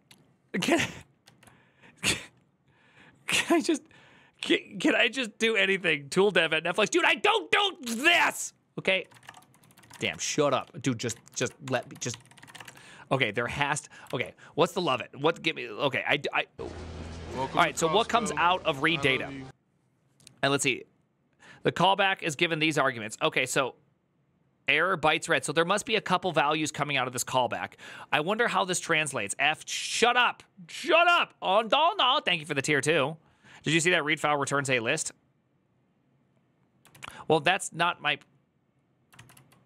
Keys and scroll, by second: 7.9 alt+{, 8.6-13.5 typing, 13.9 alt++, 36.7 alt+{, 38.9 ctrl+c, 39.1 u.